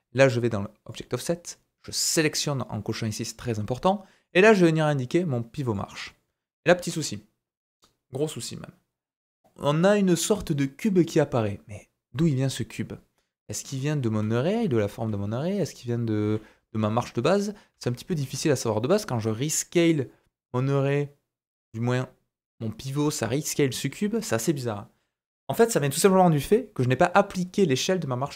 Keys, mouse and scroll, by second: 0.8-2.2 drag, 2.2-4.2 middle drag, 4.2-15.4 drag, 14.1 s, 15.8 click, 16.2 s, 17.2 click, 17.7 s, 26.7 click.